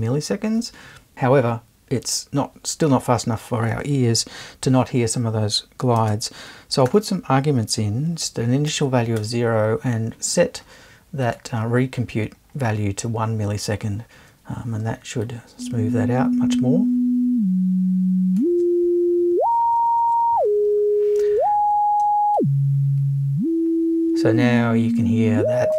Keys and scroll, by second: 6.9 0, 8.7 space, 9.2 i.